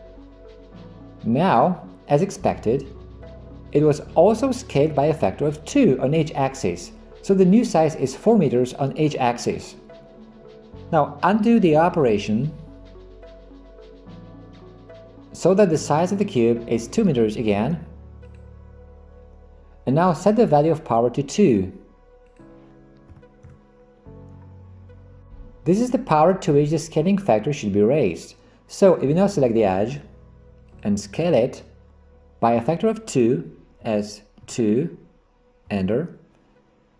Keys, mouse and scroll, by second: 11.7 ctrl+z, 14.5 ctrl+z, 22.5-23.8 drag, 30.8 click, 33.8 s.